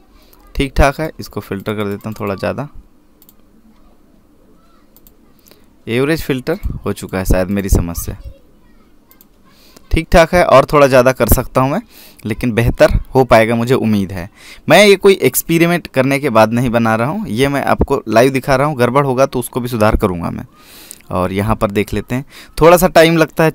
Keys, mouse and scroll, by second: 0.4 scroll down 1, 1.8 click, 5.9 click.